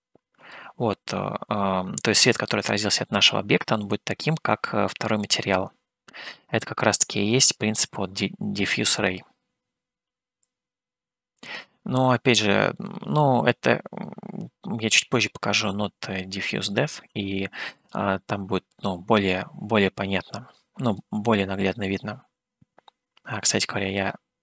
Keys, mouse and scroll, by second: 10.6 click, 12.6 click, 13.8-17.2 drag, 18.1 click, 21.0 click, 24.1 click.